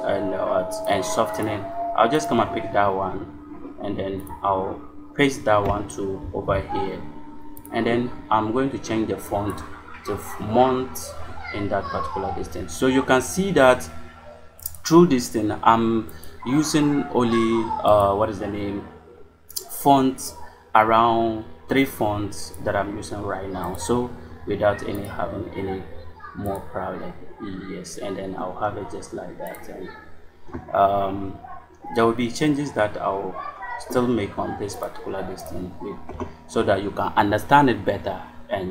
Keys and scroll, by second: 1.3 space, 6.1 ctrl+v.